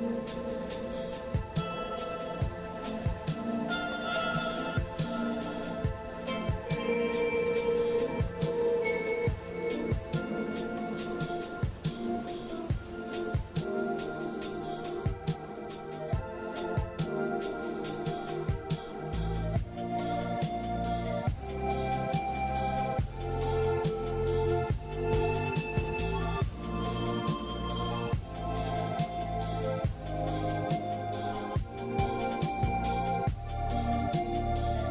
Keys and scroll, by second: 0.5 ctrl+z, 3.6 alt+scroll down 1, 4.0 scroll up 1, 5.0 ], 6.1 scroll down 1, 6.3-6.6 scroll up 1, 6.7 scroll down 1, 6.8 scroll up 1, 14.1 ctrl+z, 18.4 scroll down 1, 18.5 scroll up 1, 20.9 ctrl+z, 21.3 scroll down 1, 21.5 scroll up 1, 22.1 ctrl+z, 22.4 ctrl+z, 22.8 ], 24.4 ctrl+z, 32.5 scroll down 1, 32.6 scroll up 1, 32.7 scroll down 1, 33.9 ctrl+z.